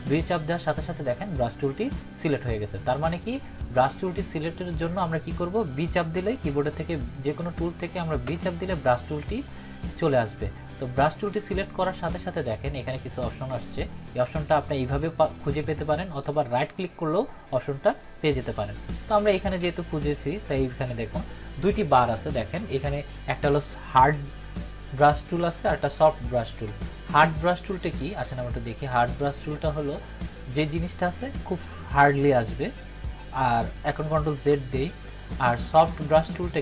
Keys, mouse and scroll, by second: 2.9-3.9 drag, 7.2 click, 7.3 click, 8.2 b, 16.2 right click, 17.9-18.6 drag, 28.2-32.5 drag, 34.5 ctrl+z, 36.2 click.